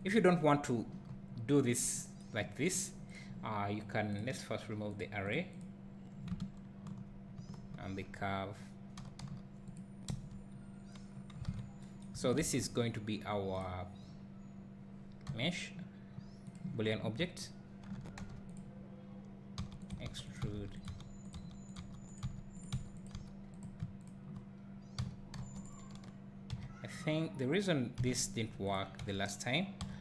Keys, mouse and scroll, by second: 0.1 click, 1.1 scroll up 1, 3.2 click, 5.0-7.7 drag, 7.7 scroll down 1, 9.2 g, 9.8 click, 10.2 KP_Decimal, 10.7 scroll up 1, 11.1 scroll down 1, 11.5 alt+a, 13.6 shift+a, 14.3-15.0 scroll down 1, 15.3 g, 16.5 click, 16.8 scroll up 1, 17.2 1, 18.0 Tab, 18.2 1, 18.6 click, 19.6-23.1 typing, 19.9 click, 20.8 click, 21.3 click, 21.7 click, 22.2 click, 22.6 click, 23.0 click, 23.6 click, 24.1 shift+click, 25.0 f, 25.4 2, 25.6 click, 28.7 x, 29.0 a, 29.8 f.